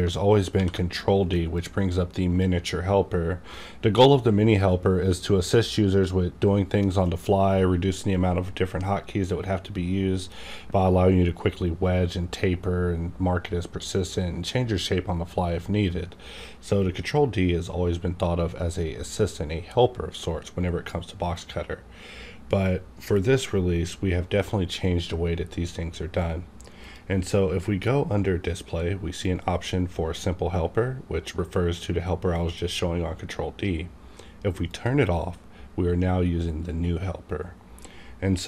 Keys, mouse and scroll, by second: 0.5 ctrl+d, 1.5-4.6 drag, 21.2 right click, 21.2-23.7 drag, 26.8 click, 26.8 right click, 34.7 click.